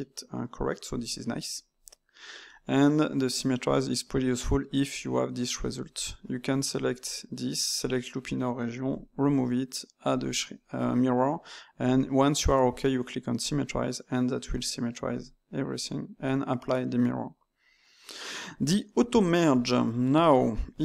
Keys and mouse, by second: 5.5 Tab, 5.9 alt+click, 6.7 a, 10.0-12.0 drag, 12.0-13.4 middle drag, 13.4 click, 13.9 middle click, 14.4 Tab, 15.1 click, 15.7-20.8 middle drag.